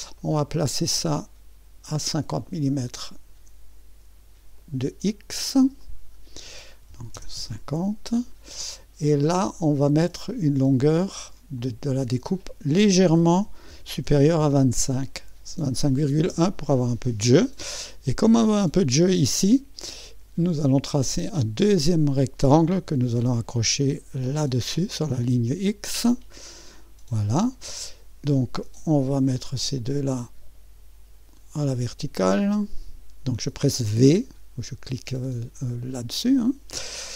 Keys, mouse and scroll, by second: 0.2-1.2 middle drag, 3.1 click, 4.6 click, 5.8 click, 6.9 KP_5, 7.1 KP_0, 7.4 Return, 9.6 click, 10.2-13.4 drag, 13.2-14.9 typing, 16.2 Return, 21.1-24.2 drag, 24.5 click, 26.4 click, 27.2 middle click, 29.4 click, 32.5 click.